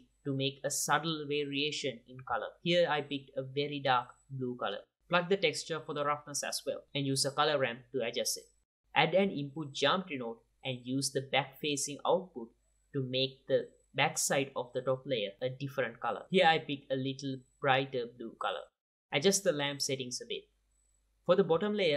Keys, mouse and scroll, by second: 0.1 middle click, 0.4 click, 1.5 middle click, 2.0 click, 2.3 click, 3.4 q, 3.6 click, 4.1 click, 4.7 click, 5.5 middle click, 5.9-6.4 drag, 7.2 click, 7.6 click, 8.3 middle click, 9.0 shift+a, 9.7-11.5 drag, 11.5 q, 12.2-13.3 drag, 14.2-15.1 drag, 15.4 click, 18.5-19.0 drag, 20.6 click, 21.2 click, 21.8 click.